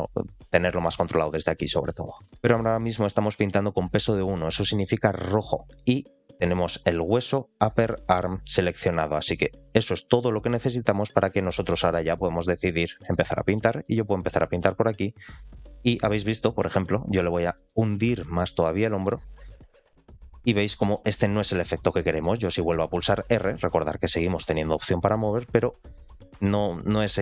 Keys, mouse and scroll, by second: 6.1 scroll down 2, 6.5 shift+middle click, 10.4 middle click, 11.2-11.5 scroll up 2, 11.6 shift+middle click, 12.0 middle click, 13.6-15.4 drag, 15.5 middle click, 16.6 middle click, 17.5-20.4 drag, 20.5 middle click, 21.0-21.7 scroll down 2, 21.4 middle click, 22.0 shift+middle click, 23.1 r.